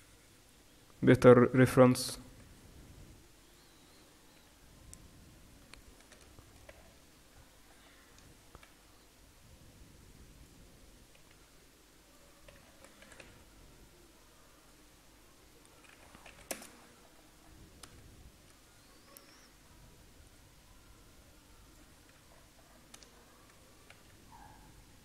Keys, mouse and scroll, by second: 3.5-5.8 right drag, 4.4 g, 6.4-8.2 right drag, 8.2 middle click, 8.7 e, 11.4 s, 13.1 e, 15.9 s, 16.9 middle click, 23.2-25.0 middle drag, 24.3 r.